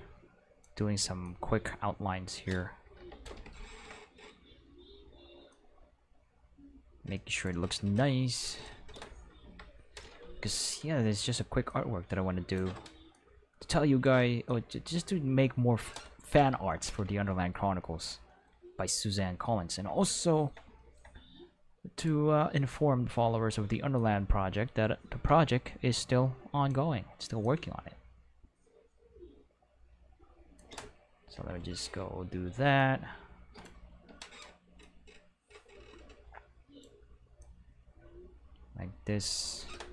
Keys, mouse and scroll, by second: 1.2-2.5 drag, 3.0 Return, 5.5-7.4 drag, 8.0 click, 9.5 Return, 10.5 click, 11.7 click, 12.7 Escape, 13.1 click, 14.1 Escape, 14.5-15.9 drag, 16.4 Return, 22.0 click, 24.0-26.7 drag, 27.4-30.6 drag, 31.4 Return, 32.8 click, 33.9 Escape, 34.8-36.8 drag, 37.4-39.6 drag.